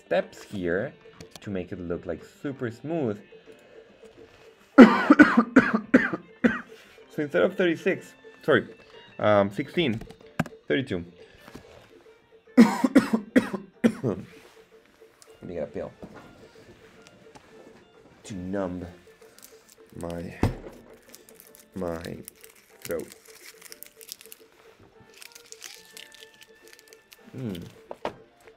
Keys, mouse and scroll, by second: 0.2 middle click, 0.6-1.3 scroll down 4, 1.3 z, 1.4-2.2 middle drag, 2.4-3.3 scroll up 2, 3.5-11.8 drag.